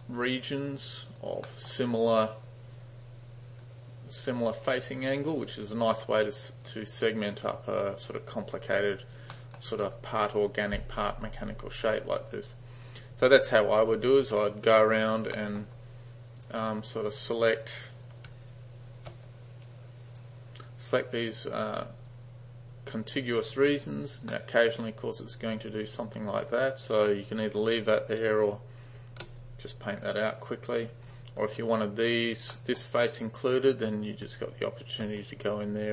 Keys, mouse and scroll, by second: 0.9-1.3 drag, 1.5 middle drag, 2.5-3.7 drag, 4.4-5.3 drag, 5.9 click, 7.1-8.5 drag, 9.4 middle click, 11.5-12.1 drag, 14.3 d, 14.7-15.2 drag, 15.4 middle drag, 15.9-16.5 drag, 16.7-17.1 drag, 18.3 g, 20.1 click, 20.9-21.7 drag, 22.1-23.6 drag, 24.3-24.7 middle drag, 24.9-25.3 drag, 29.1 shift+g, 30.1-30.9 drag, 32.5 middle drag, 34.3 g.